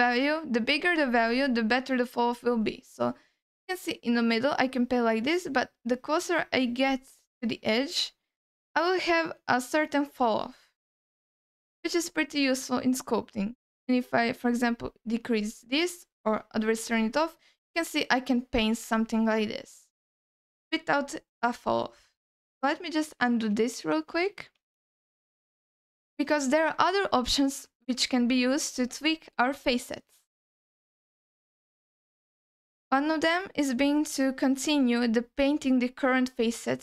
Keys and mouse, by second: 1.6 f, 2.5 f, 2.8 f, 3.3-6.9 drag, 7.1 alt+middle click, 10.8 alt+middle click, 11.6 ctrl+alt+middle click, 12.1 alt+middle click, 13.4-15.3 drag, 16.9 middle click, 17.4-18.9 drag, 19.1 alt+middle click, 23.1 ctrl+z, 23.4 ctrl+z, 23.8 ctrl+z, 24.6 ctrl+z, 25.0 ctrl+z, 26.5 ctrl+alt+middle click, 27.0 alt+middle click, 31.9 shift+middle click, 32.5 ctrl+alt+middle click, 33.2 middle click, 34.3 shift+middle click.